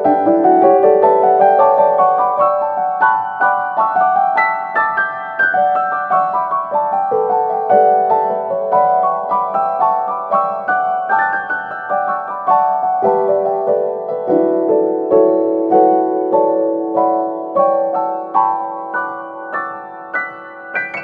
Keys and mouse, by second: 0.4 middle click, 1.8 shift+c, 3.0 shift+middle click, 4.1 shift+middle click, 5.2-9.0 shift+middle drag, 9.3 middle click, 10.5 middle click, 11.1 shift+middle click, 11.8 middle click, 12.6 shift+middle click, 13.2 middle click, 14.0 shift+middle click, 14.7 middle click, 15.1 shift+middle click, 17.2 shift+middle click, 19.0 shift+click, 20.4 middle click.